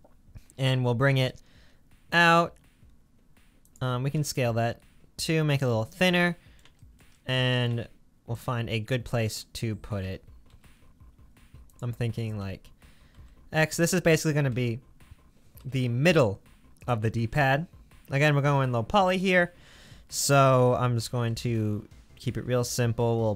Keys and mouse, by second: 0.7 g, 4.2 s, 10.0 g, 12.4 g, 14.5 g, 19.2 middle click, 20.6 g.